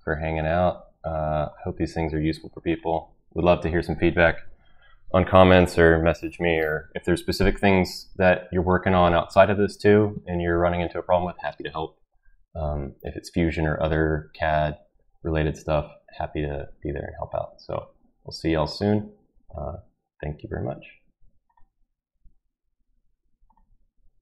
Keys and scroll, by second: 21.5 typing.